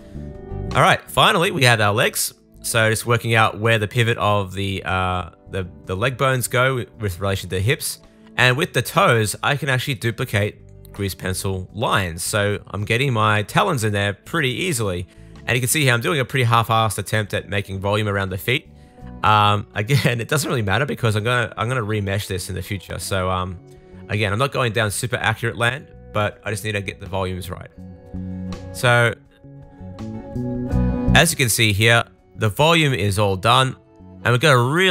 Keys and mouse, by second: 0.4 super+s, 1.0-4.1 shift+drag, 1.4 Tab, 1.5-3.4 middle drag, 1.5-3.4 right drag, 2.6 r, 3.6 Tab, 4.1 Tab, 4.1 middle click, 4.7 click, 4.8 middle click, 5.0 click, 5.1 middle click, 5.5 click, 5.6-6.8 middle drag, 6.7 super+s, 6.8 shift+click, 7.6 super+l, 7.8 shift+d, 8.1 super+z, 8.4 click, 8.6 r, 8.8 click, 9.1 r, 9.3 shift+click, 10.3 shift+d, 10.7 r, 10.9 click, 11.0-12.4 middle drag, 12.4 click, 12.6 super+middle click, 12.9 super+z, 13.1 click, 13.2 middle click, 13.5 click, 13.6 middle click, 13.8 click, 14.0 middle click, 14.5 click, 14.6 x, 14.9 super+z, 15.1 click, 15.4 click, 15.7 right click, 16.0 Tab, 16.5 super+s, 16.7 shift+middle click, 17.1 shift+middle click, 17.5 click, 17.6 Tab, 18.2 super+l, 18.4-20.8 typing, 19.2 click, 19.9 click, 21.2 click, 21.4 Tab, 21.6 middle click, 21.9-28.1 shift+middle drag, 23.3 super+s, 27.3-31.1 drag, 27.3 right click, 27.6 r, 28.3 middle click, 28.3 right click, 28.5 r, 29.3 Tab, 30.9 super+s, 31.1 middle click, 32.3 middle click, 32.5 Tab, 32.5 middle click, 33.3-34.9 drag, 34.4 super+middle click, 34.4 super+right click.